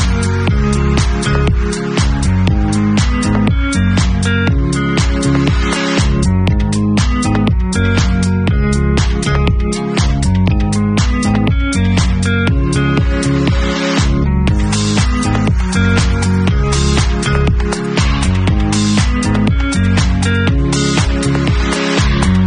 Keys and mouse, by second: 0.6 Tab, 1.1-2.1 middle drag, 2.1-6.8 drag, 6.1 Tab, 12.1 a, 12.7 shift+middle click, 13.6 ctrl+e, 13.7-15.9 drag, 15.9 alt+middle click, 16.4-20.4 alt+drag, 18.0 Tab, 19.2 ctrl+super+r, 19.3 ctrl+super+y, 20.4-20.8 middle drag, 20.8-22.4 drag.